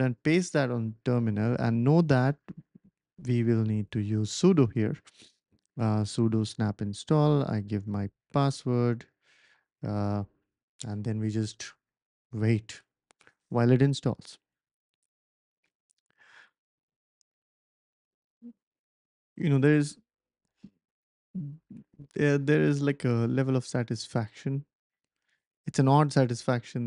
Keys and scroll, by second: 1.4 Left, 1.8 Left, 1.9 Left, 2.0 Left, 2.1 Left, 2.2 Left, 3.0-5.6 typing, 6.9-7.7 typing.